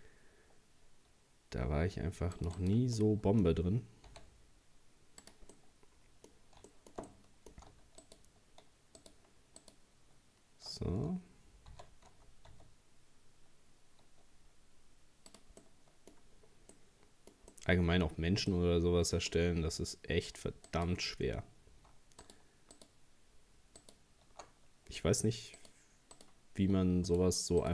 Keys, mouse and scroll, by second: 3.0-4.1 middle drag, 4.1 s, 5.5-8.0 middle drag, 8.0 alt+shift+right click, 9.0 alt+shift+right click, 9.6 alt+shift+right click, 11.7 s, 15.6 middle click, 16.4-16.7 scroll down 1, 16.7-19.7 middle drag, 19.7-20.7 scroll down 2, 20.7 right click, 21.2-21.6 scroll up 3, 22.2 alt+shift+right click, 22.8 alt+shift+right click, 23.8 alt+shift+right click, 25.6 shift+right click, 26.2 shift+right click, 27.1 shift+right click, 27.6 shift+right click.